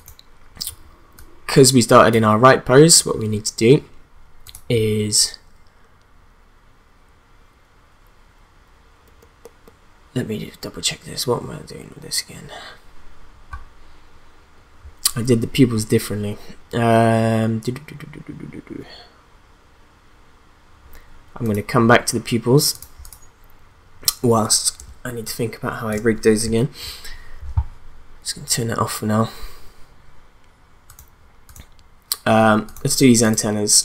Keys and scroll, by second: 24.8 space.